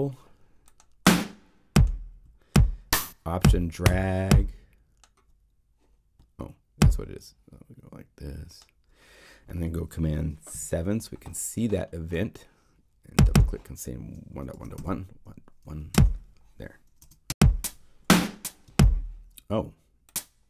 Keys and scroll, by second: 10.5 super+7, 17.0 0.